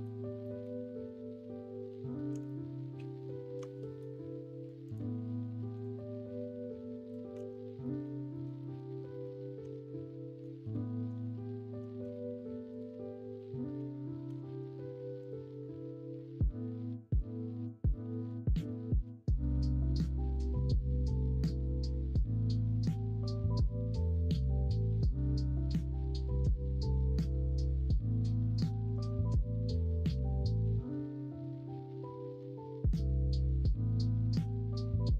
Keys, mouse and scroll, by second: 2.4-4.0 middle drag, 7.3 alt+z, 7.8 middle click, 7.8 scroll up 1, 8.0 scroll down 1, 8.3 scroll up 1, 8.4 scroll down 1, 8.6 scroll up 1, 9.2 middle click, 9.2 scroll down 1, 9.6 Tab, 12.0 ctrl+s, 14.3 ctrl+KP_Subtract, 15.5-17.2 middle drag, 17.5 middle drag, 17.9 middle click, 18.9 middle drag, 19.9 middle click, 24.8-25.5 middle drag, 25.8-26.9 middle drag, 27.1 middle click, 27.7 middle click, 28.8 shift+a, 31.2 click, 32.3 Tab.